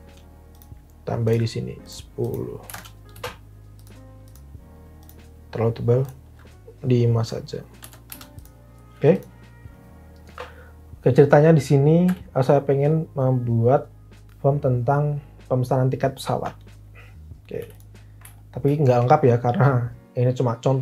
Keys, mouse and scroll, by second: 2.3-3.1 typing, 3.1 Return, 7.8 typing, 8.0 Return, 12.0 t, 17.7 t.